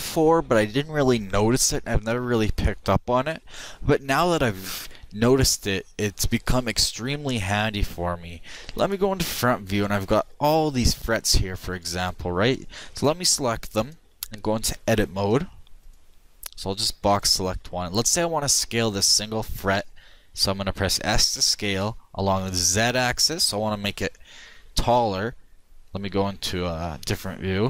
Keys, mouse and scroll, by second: 8.7 KP_1, 13.7-15.2 drag, 16.2 a, 16.2 b, 21.1 s, 26.2-27.6 middle drag.